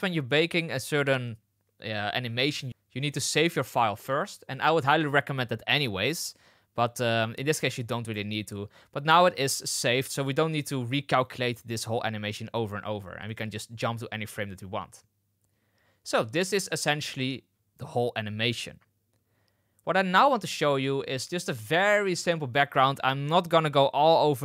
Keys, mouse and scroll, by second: 8.0 space, 9.3 space, 13.2-17.2 drag.